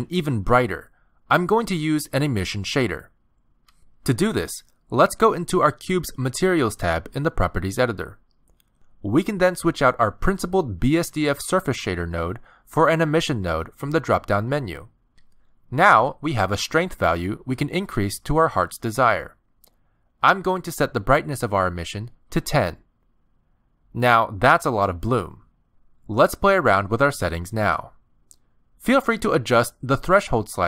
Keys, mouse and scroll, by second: 2.3 click, 3.2-4.9 scroll up 27, 10.9 click, 18.5 click, 21.0 click, 24.6 shift+middle click, 25.3 scroll down 2, 25.7 middle click, 27.2 scroll up 2, 27.7 middle click, 29.4 click.